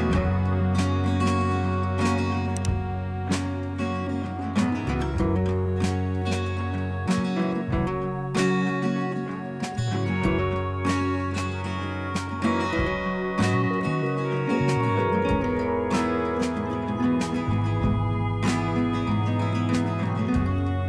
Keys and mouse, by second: 2.0 click, 4.0 click, 4.2 click, 6.4 click, 8.2 click, 10.1 click, 13.4-15.8 drag, 17.5 click, 17.9 click, 19.1 ctrl+z.